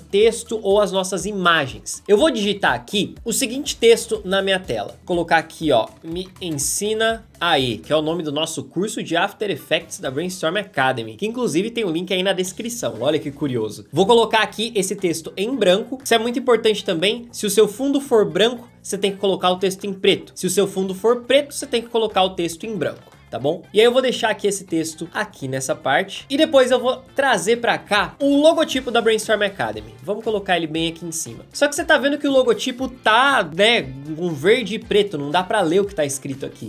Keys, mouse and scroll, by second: 5.8-7.1 typing, 7.6 ctrl+a, 22.9 v.